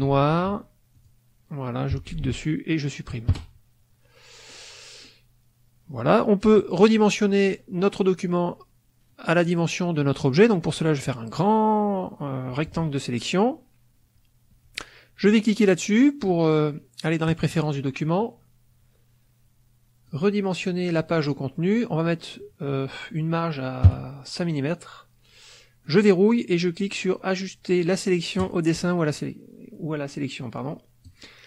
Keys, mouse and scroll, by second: 0.9 click, 4.4 click, 10.7-12.8 drag, 17.2 click, 20.0 click, 21.7 click, 25.8 click, 28.3 click, 31.0 click.